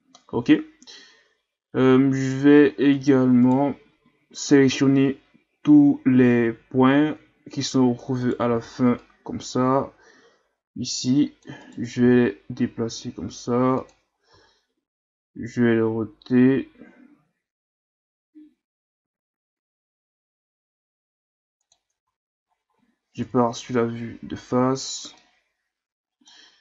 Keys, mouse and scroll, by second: 2.9 right click, 3.5 right click, 8.2 right click, 8.5 c, 12.0 g, 14.3 r, 22.0 Tab, 22.5-23.0 scroll down 4, 23.2 KP_1, 24.2-24.7 scroll up 4, 25.1-26.6 middle drag.